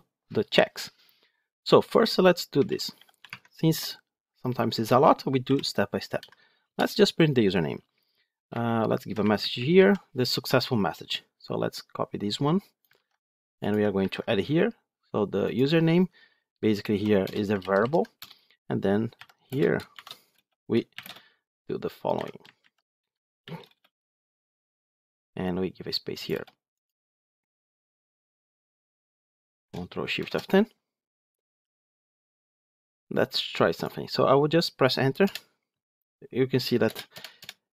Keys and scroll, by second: 3.2 Tab, 6.5 Return, 12.9 ctrl+c, 13.8 ctrl+v, 19.0 Delete, 21.7 Delete, 30.1 ctrl+shift+F10.